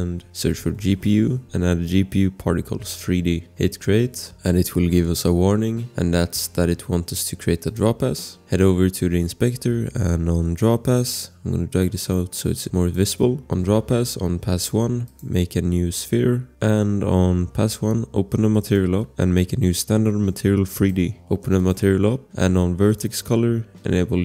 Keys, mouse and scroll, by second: 0.1-1.2 typing, 3.6 click, 4.3 click, 7.6 click, 11.9 click, 13.2 click, 13.4 click, 16.5 scroll, 18.6 click, 18.9 scroll, 20.7 click, 21.6 click, 22.2 scroll.